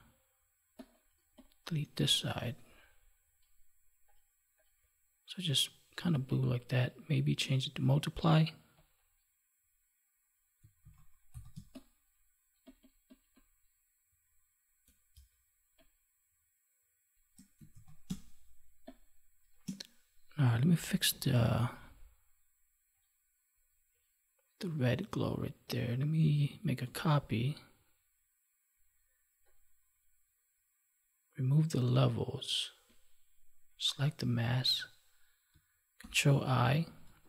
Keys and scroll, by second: 10.8 ctrl+s, 11.5 space, 26.8 ctrl+j, 35.9 ctrl+i.